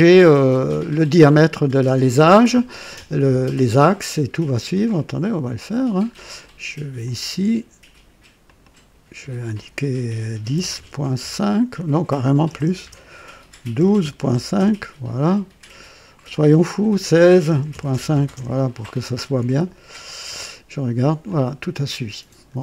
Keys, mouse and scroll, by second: 4.8 click, 6.9 click, 8.4 click, 10.2 KP_1, 10.4 KP_0, 10.7 KP_Decimal, 11.1 KP_5, 12.4-14.2 typing, 14.5 KP_Enter, 16.2 click, 17.4-18.3 typing, 19.9 click, 21.2-22.6 drag.